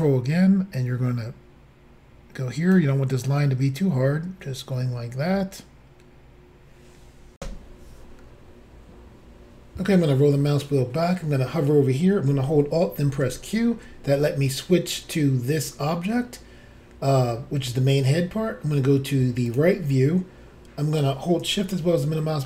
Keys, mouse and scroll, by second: 0.8 ctrl+click, 7.4 Insert, 9.9-10.4 scroll down 3, 13.2 alt+q, 19.5 click, 21.6 shift+middle click.